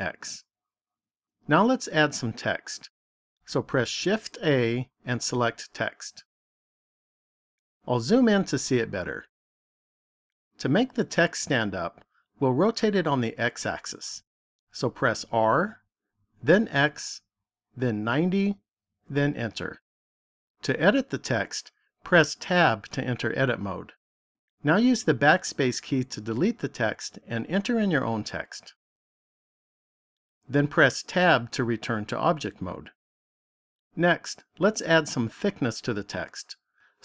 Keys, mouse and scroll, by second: 0.8 x, 4.3 shift+a, 8.2-9.6 scroll up 4, 9.6-10.1 scroll up 2, 15.3 r, 22.5 Tab, 25.0 BackSpace, 25.3 BackSpace, 25.6 BackSpace, 25.9 BackSpace, 27.0-29.0 typing, 31.4 Tab.